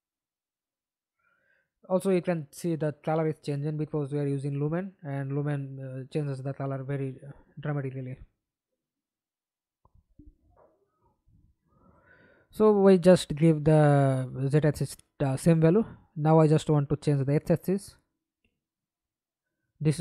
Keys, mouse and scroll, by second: 0.0-2.1 typing, 3.0 Escape, 3.4 middle click, 4.1 F11, 7.2 right click, 12.2 ctrl+c, 14.9 ctrl+v, 15.4 Return.